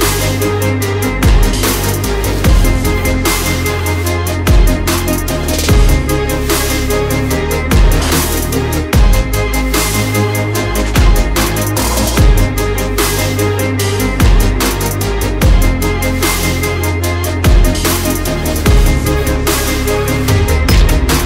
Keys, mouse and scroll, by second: 0.3 click, 3.7 click, 6.1 click, 14.0 click, 19.2 click.